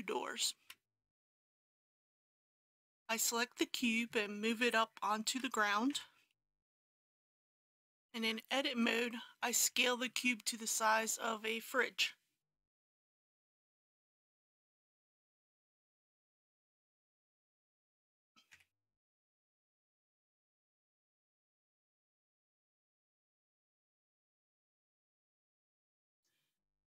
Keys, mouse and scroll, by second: 0.6 KP_1, 5.3 g, 5.9 z, 6.3 KP_1, 7.7 Tab, 8.7 3, 10.0 shift+middle click, 12.8 s, 13.3 x, 13.7 KP_2, 15.5 middle click, 16.2 click, 17.2 KP_1, 17.9 g, 18.5 z, 18.8 KP_3, 21.2 KP_3, 22.5-23.8 typing.